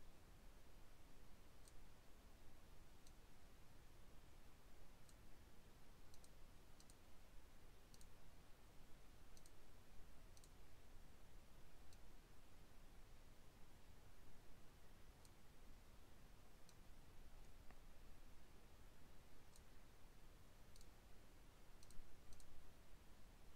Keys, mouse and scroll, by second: 3.0-5.1 drag, 6.1 click, 6.8 click, 7.9 click, 9.3 click, 10.3 click, 11.9-15.4 drag, 16.6-19.7 drag, 20.7 click, 21.8 click, 22.2 click.